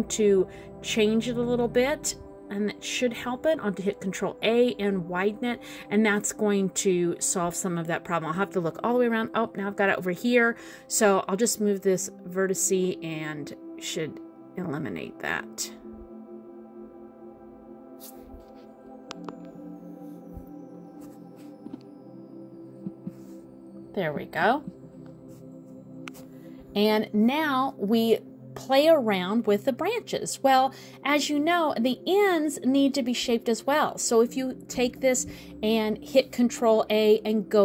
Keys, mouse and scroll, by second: 0.7 middle click, 4.1 ctrl+a, 8.8 middle click, 10.1 middle click, 11.2 middle click, 12.1 click, 13.5 ctrl+a, 18.6 click, 19.7 middle click, 21.1 middle click, 22.4 click, 23.4 click, 24.3 middle click, 25.7 middle click, 27.6 middle click, 28.4 middle click, 29.4 scroll down 2, 29.8 middle click, 30.6 middle click, 32.4 scroll up 1, 35.3 click, 35.8 middle click, 37.5 ctrl+a.